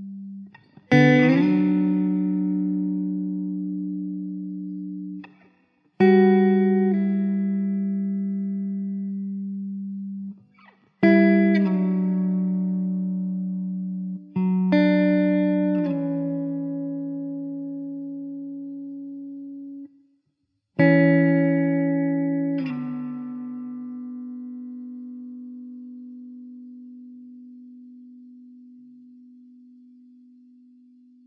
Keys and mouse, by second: 2.5 middle click, 16.1 1, 26.6 alt+w, 27.3 alt+w, 27.4 alt+middle click, 31.0 F4.